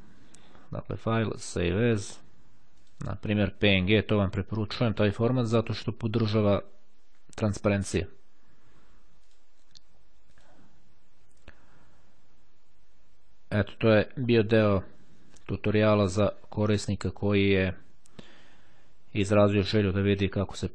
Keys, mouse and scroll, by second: 1.4 click, 2.9 click, 3.6-4.6 typing, 5.9 Return, 8.9-9.9 drag, 10.5 click.